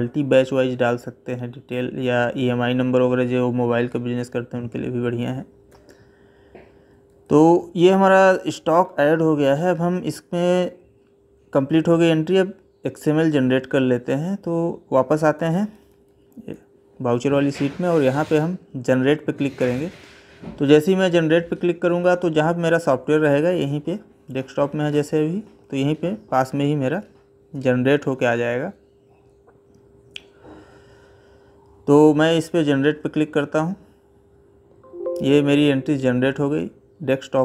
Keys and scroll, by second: 5.5 Left, 15.0 Left.